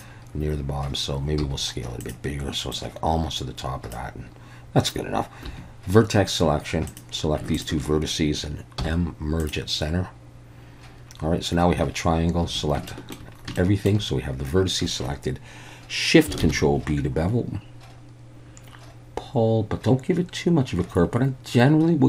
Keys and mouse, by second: 1.4 s, 2.0 click, 2.8-3.9 drag, 5.5 1, 6.9 click, 8.8 m, 12.4 a, 12.9 shift+middle click, 13.6 shift+click, 16.4 ctrl+shift+b.